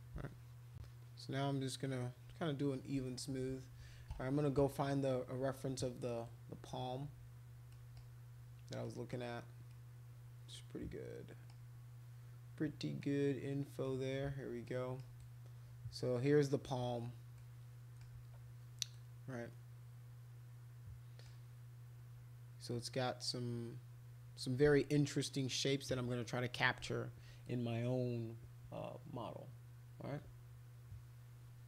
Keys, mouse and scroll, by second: 0.2 shift+click, 0.4 shift+click, 0.6 shift+click, 0.8 shift+click, 1.0 shift+click, 1.7 shift+click, 2.1 shift+click, 6.2 right click, 7.7 middle click, 8.8 middle click, 9.7-11.4 middle drag, 13.0 middle click, 14.7 middle click, 15.2-16.6 right drag, 17.4 middle click, 18.9-21.2 middle drag, 27.4-31.6 right drag.